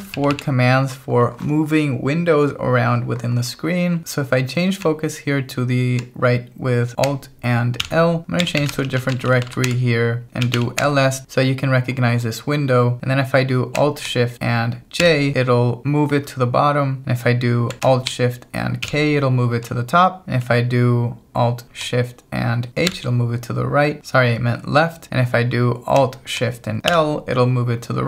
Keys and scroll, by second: 0.0 j, 1.0 j, 7.8 alt+l, 8.2-11.1 typing, 9.8 Return, 15.0 alt+shift+j, 18.9 alt+shift+k, 22.9 alt+shift+h, 26.9 alt+shift+l.